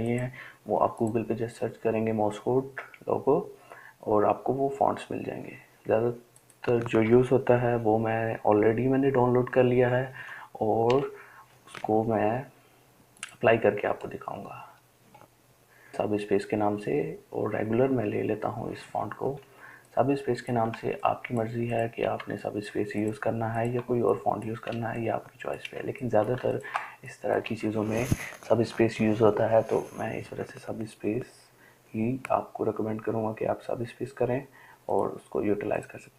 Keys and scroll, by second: 9.7-11.1 typing.